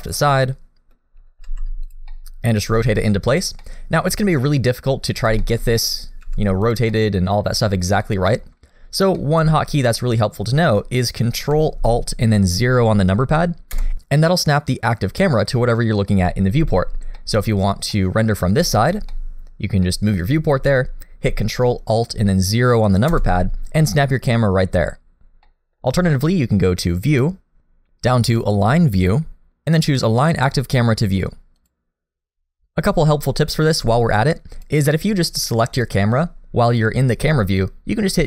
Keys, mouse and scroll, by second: 0.4 middle click, 1.5 g, 2.1 middle click, 2.7 g, 3.6 middle click, 5.0-5.3 scroll up 1, 5.4 shift+middle click, 5.7 scroll up 1, 5.8 middle click, 6.3 r, 6.9 middle click, 8.0 shift+middle click, 8.5 scroll up 1, 9.2 shift+middle click, 13.8 ctrl+alt+KP_0, 17.2 middle click, 17.6-17.9 scroll up 1, 17.9 middle click, 18.4 scroll down 1, 18.6 shift+middle click, 19.1 middle click, 19.9 middle click, 23.1 ctrl+alt+KP_0, 24.3 scroll up 1, 25.5 middle click, 27.1 click, 34.5 click, 35.8 click.